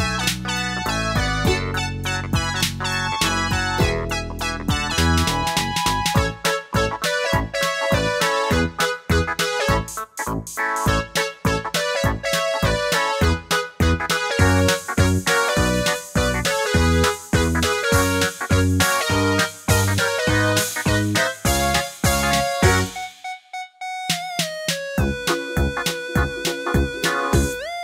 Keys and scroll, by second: 1.1 Page_Down, 1.5 Page_Up, 2.5 scroll, 2.9 super+d, 10.9 super+d, 14.9 Down, 15.0 Down, 18.0 Up, 19.1 Right, 19.2 Right, 19.3 Right, 19.4 Right, 19.5 Right, 19.6 Right, 20.4 Left, 20.5 Left, 20.6 Left, 20.7 Left, 20.8 Left, 20.9 Left, 25.8 super+d.